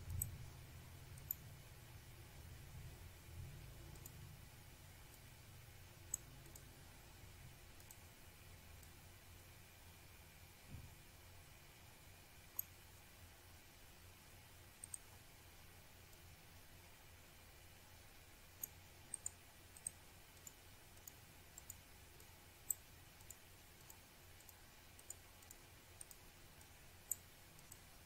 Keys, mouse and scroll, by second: 3.1 click, 4.2 click, 5.5 click, 7.7 click, 13.4 click, 14.6 click, 18.1 click, 20.0 click, 21.2 click, 22.5 click, 24.3 click, 25.9 click, 27.8 click.